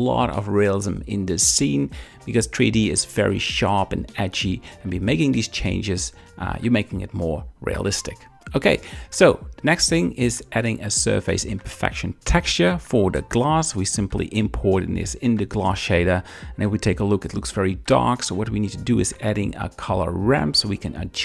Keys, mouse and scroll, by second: 0.1 shift+click, 0.3 shift+middle click, 0.8 shift+middle click, 1.2 click, 1.4 g, 2.1 click, 2.4-4.3 typing, 2.9 shift+middle click, 3.1 click, 4.8 shift+click, 5.0 shift+middle click, 5.5 click, 5.6 g, 6.0 shift+click, 6.1 shift+middle click, 6.1 shift+scroll, 6.4 click, 6.6 g, 6.6 z, 6.9 shift+click, 7.4 click, 7.5 g, 8.1 shift+click, 8.3 shift+middle click, 8.4 click, 8.7 click, 11.0 middle click, 13.7 click, 15.3 KP_0, 15.9 z, 17.2-20.1 drag, 17.2 g, 20.6 click.